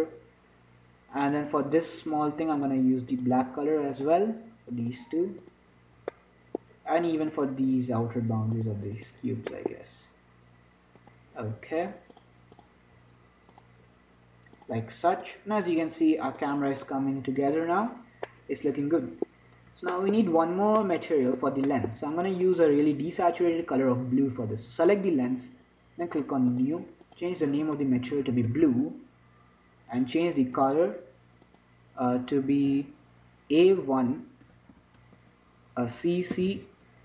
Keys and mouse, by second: 2.5 right click, 3.5 click, 6.4 click, 8.3 right click, 9.4-10.7 drag, 11.3 click, 12.0 right click, 13.0 click, 13.8 middle click, 14.2 click, 14.9 middle click, 15.4-16.6 drag, 18.5-23.4 middle drag, 22.7-24.6 drag, 23.4 z, 23.8 z, 26.8-29.2 drag, 30.8-34.5 drag, 36.8 c.